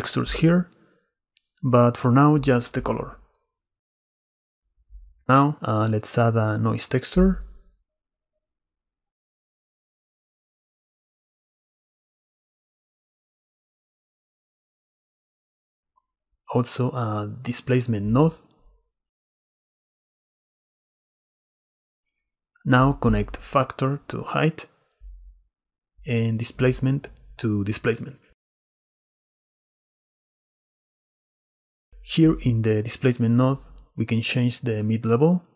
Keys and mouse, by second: 1.1-3.3 drag, 4.4 click, 5.9 shift+a, 8.0 shift+a, 14.9 shift+a, 22.0-24.0 drag, 25.1-26.8 drag, 27.9 middle click, 28.8 shift+middle click, 30.5 click, 33.0-34.4 shift+drag.